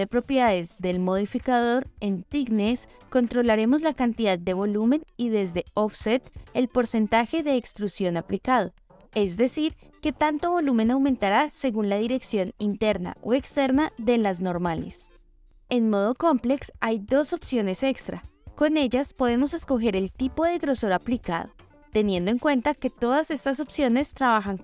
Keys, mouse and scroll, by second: 0.1-1.5 drag, 4.9-6.9 drag, 7.9-15.4 drag, 19.9-21.8 drag.